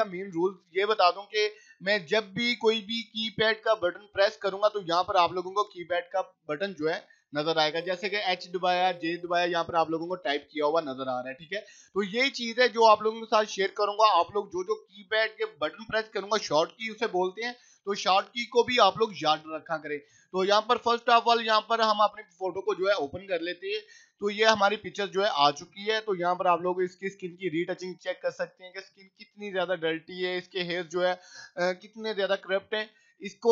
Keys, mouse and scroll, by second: 1.8 click, 4.7 click, 12.2-14.0 drag, 20.7 click, 25.4 click, 28.8 scroll up 1, 32.8 right click, 33.1 click.